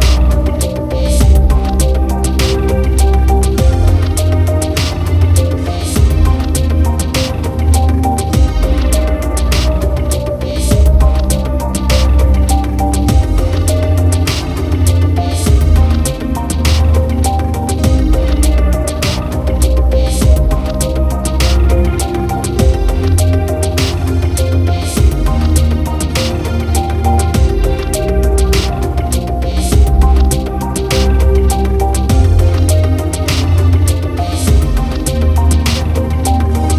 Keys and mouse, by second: 0.2 right click, 0.6 right click, 1.0 right click, 1.4 right click, 1.9 right click, 2.4 right click, 2.6 right click, 3.3 right click, 3.9 right click, 4.4 right click, 5.1 right click, 5.7 right click, 5.9 right click, 7.3 right click, 9.7 right click, 10.0 right click, 10.3 right click, 15.3 right click, 15.8 right click, 16.5 right click, 17.1 right click, 24.4 right click, 25.0 right click, 25.5 right click, 26.2 right click, 36.1 right click, 36.6 right click.